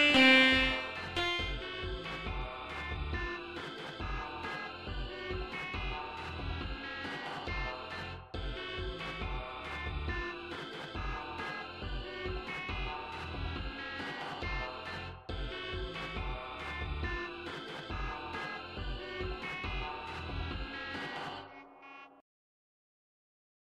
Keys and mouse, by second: 0.0 click, 1.1 click, 5.3 click.